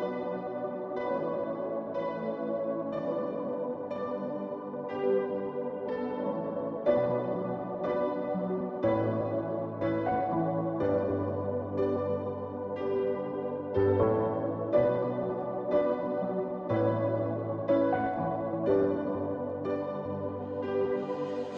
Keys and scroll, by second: 0.0 ], 9.5-10.9 typing.